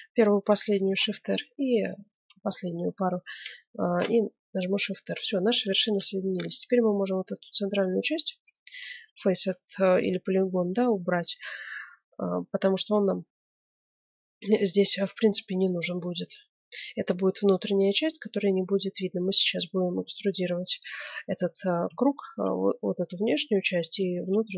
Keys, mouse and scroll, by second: 0.8 shift+r, 1.5-3.7 right drag, 4.0 shift+r, 4.3 middle click, 5.6 ctrl+Tab, 5.8 ctrl+Tab, 7.2 middle click, 7.7 middle click, 8.3 x, 9.9-13.1 middle drag, 15.2-19.6 middle drag, 20.0 ctrl+Tab, 21.3-23.9 right drag, 24.1-24.5 middle drag.